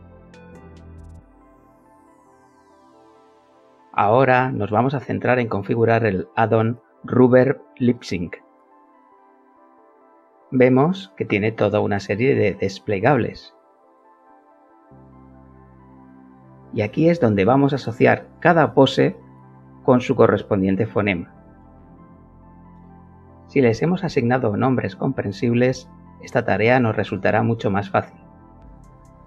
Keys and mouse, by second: 2.1-4.1 alt+middle drag, 4.4-5.8 alt+middle drag, 10.5 click, 12.0 click, 13.1 click, 14.4 click, 15.0 middle click, 16.0 click, 17.2 click, 18.6 click, 20.2 click, 21.2 click, 22.6 click, 23.9 click, 26.2 click, 27.7 click.